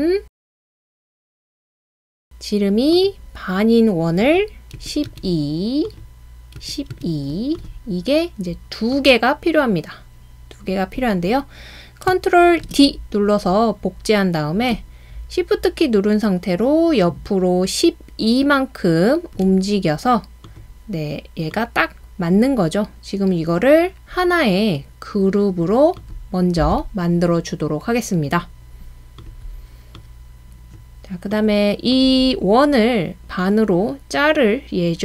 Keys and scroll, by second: 4.8-5.1 typing, 6.6-6.9 typing, 12.6 super+d.